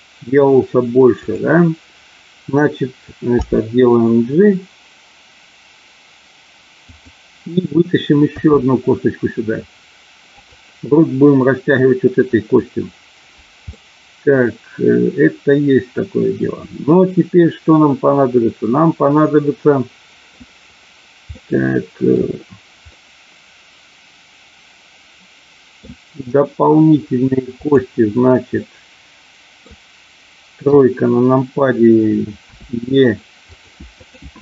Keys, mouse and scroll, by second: 1.1 click, 3.4 g, 6.9 click, 8.3 e, 10.3 click, 13.7-20.3 middle drag, 21.3 middle click, 22.9-25.8 middle drag, 27.5 click, 28.7-29.8 middle drag, 30.7 KP_3, 32.4 e, 33.5 click, 33.9 click.